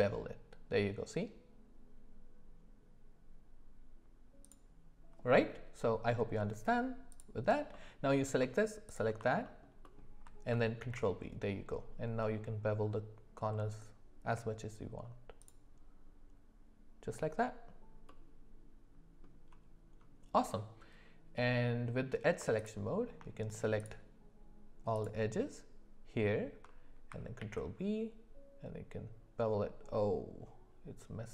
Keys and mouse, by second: 6.1 middle click, 7.1 click, 7.7 middle click, 10.8 ctrl+b, 18.1-19.2 middle drag, 27.4 ctrl+b.